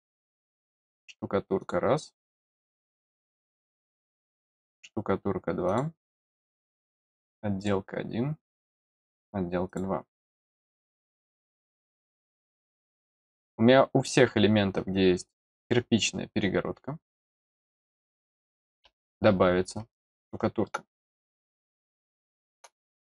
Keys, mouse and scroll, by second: 0.3 click, 0.4 click, 1.5 click, 4.4 click, 5.6 click, 6.9 click, 7.5 click, 8.8 click, 9.6 click, 15.3 click, 17.1 click, 19.2 scroll up 1, 19.9 middle click, 21.9 middle click, 22.8-23.0 scroll up 2.